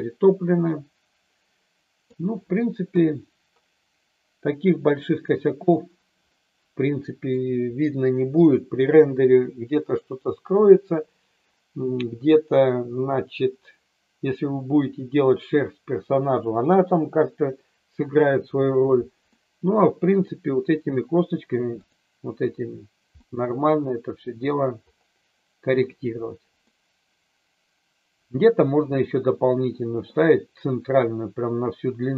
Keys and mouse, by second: 2.9 KP_3, 6.3-7.3 middle drag, 19.3 middle click, 21.8 click, 23.1-24.5 middle drag, 26.7-30.0 middle drag.